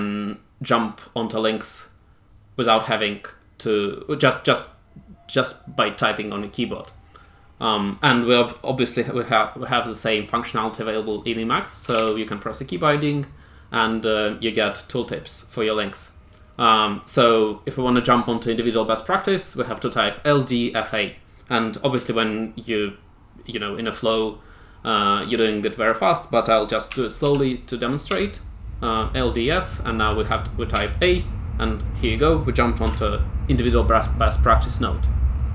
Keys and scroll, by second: 11.6-12.4 typing, 26.6-28.0 typing, 30.7 a, 32.8 Tab.